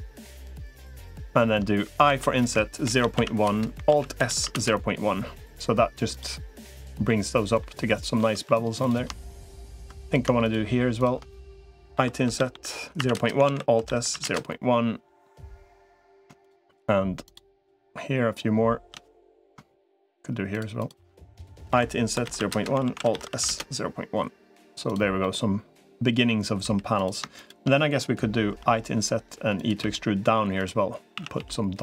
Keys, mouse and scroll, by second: 1.8 typing, 3.8 alt+s, 6.9 middle click, 7.7 middle click, 8.2 3, 8.6 click, 9.2 shift+click, 10.2 shift+click, 11.8 i, 13.2 alt+s, 15.8 click, 17.0 shift+click, 20.6 shift+click, 21.6 i, 22.6 alt+s, 25.0-26.1 middle drag, 26.4 3, 27.2 shift+click, 28.4 i, 29.6 e, 31.0 a, 31.2 g.